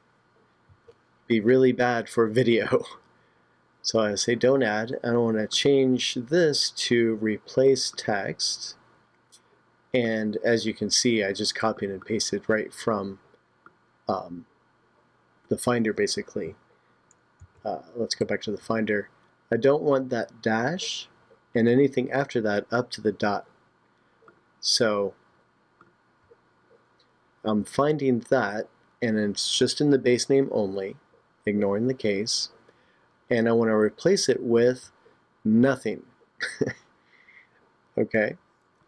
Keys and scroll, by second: 17.4 super+Tab.